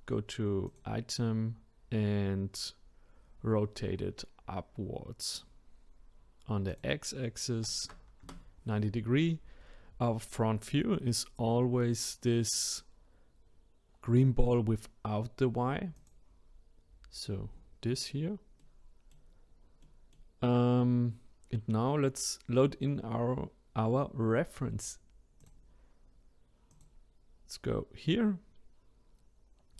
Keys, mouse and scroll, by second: 6.7-9.8 drag, 16.0 click, 17.2-18.1 scroll up 7, 18.1-18.6 scroll down 1, 18.6-19.5 middle drag, 19.5-19.8 scroll down 2, 19.8-22.9 middle drag, 25.4-26.8 drag.